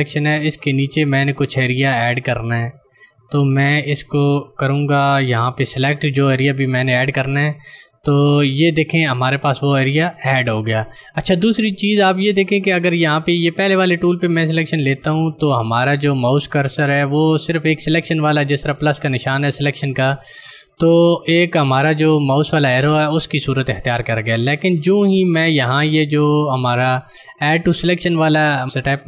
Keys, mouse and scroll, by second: 1.8 click, 15.5 ctrl+click.